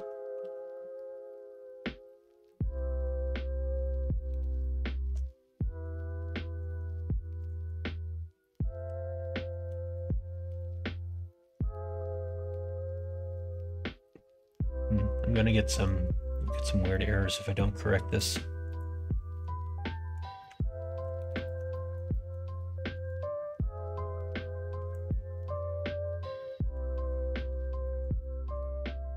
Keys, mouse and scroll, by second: 0.4 alt+h, 0.7-1.7 middle drag, 2.4-5.8 middle drag, 6.5-10.4 drag, 11.2 middle click, 14.6 middle click, 15.6 middle click, 16.3 middle click, 16.9-18.1 middle drag, 18.6 click, 20.4 2, 21.3 alt+click, 21.6 middle click, 22.0 middle click, 23.0-25.0 drag, 25.0 middle click, 25.8 middle click, 26.9 middle click, 28.0-29.1 drag.